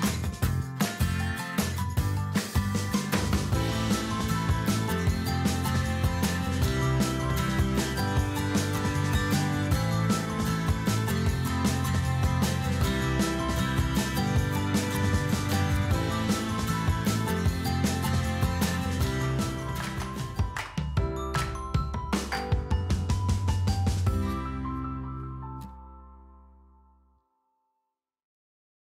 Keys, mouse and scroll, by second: 0.1 shift+click, 1.1 shift+click, 2.1 shift+click, 4.4 ctrl+b, 15.9 middle click.